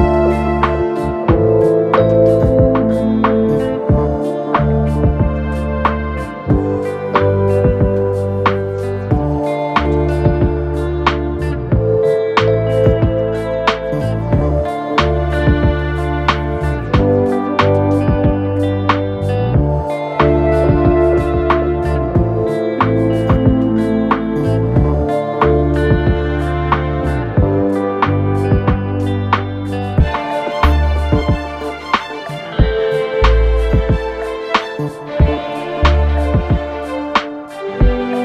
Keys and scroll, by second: 2.4 ctrl+d, 2.5 Escape, 9.9 4, 17.6 3, 17.8 ], 19.2 p, 19.6 4, 21.0 3, 21.3 ], 22.3 4, 34.5 3, 35.0 ], 36.0 ].